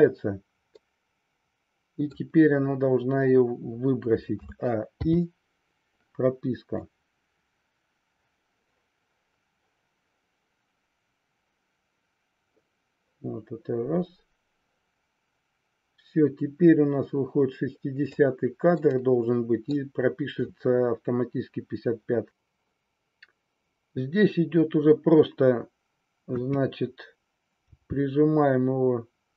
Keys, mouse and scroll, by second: 0.7-2.2 middle drag, 4.3 a, 5.0 i, 6.7-18.2 drag, 18.7 middle click, 26.1 KP_3, 27.6 g.